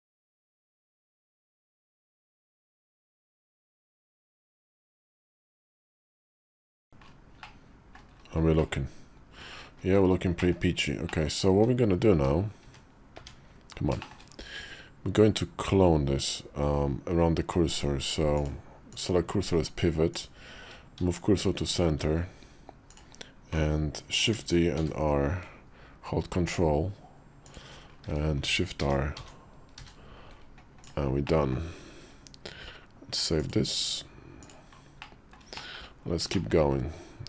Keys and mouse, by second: 0.2 g, 2.0 Tab, 2.6 Tab, 3.0 Tab, 4.3 click, 5.1 g, 6.5 Tab, 6.6 middle click, 7.3 middle click, 8.4 middle click, 10.2 middle click, 11.0 middle click, 11.6 `, 12.0 `, 12.5 `, 13.0 `, 13.9 shift+middle click, 18.4 click, 20.8 shift+s, 24.2 shift+d, 28.3 shift+r, 28.7 shift+r, 29.0 shift+r, 29.6 shift+r, 31.1 middle click, 31.6 KP_5, 33.3 click, 33.7 click, 34.9 middle click, 35.4 shift+middle click, 36.2 shift+middle click, 37.2 KP_5.